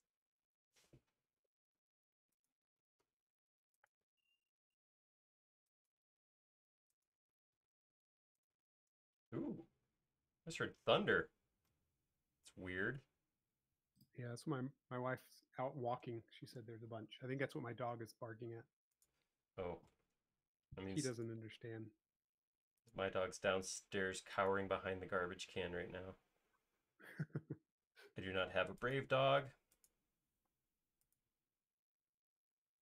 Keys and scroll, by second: 0.5 space, 1.5 l, 2.9-3.3 typing, 6.4 typing, 7.6 typing, 9.0 typing, 19.5 l, 23.2-25.0 typing, 26.6 typing, 30.7 m.